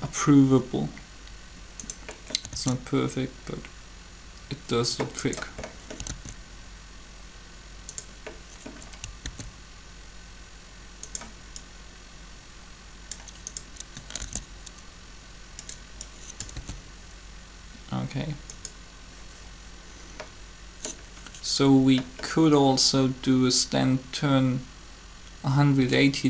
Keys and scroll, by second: 2.3 alt+a, 6.0 alt+a, 9.2 alt+a, 14.2 shift+d, 16.6 alt+a.